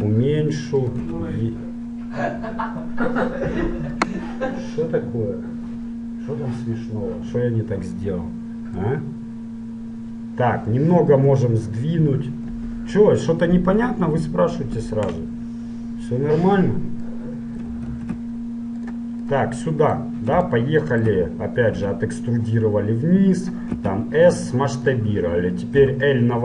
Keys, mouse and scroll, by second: 0.1 s, 1.3 e, 8.1-11.7 middle drag, 12.5 KP_1, 14.5 KP_3, 15.6-17.6 middle drag, 18.2 ctrl+Tab, 19.4-20.9 right drag, 20.9-22.5 middle drag, 22.0 e, 24.0 s, 25.9 l.